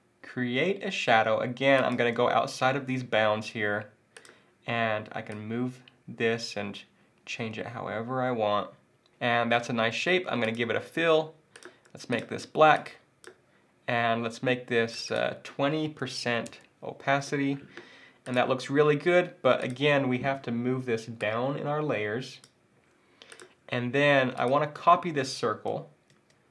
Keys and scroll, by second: 26.1 super+c.